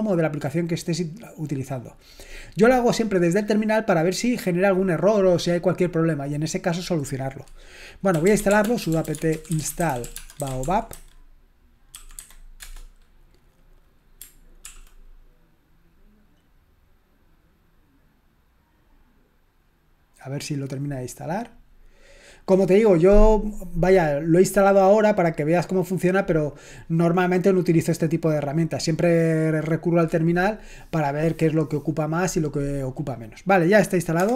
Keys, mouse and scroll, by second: 8.0-12.6 typing, 14.6 ctrl+l.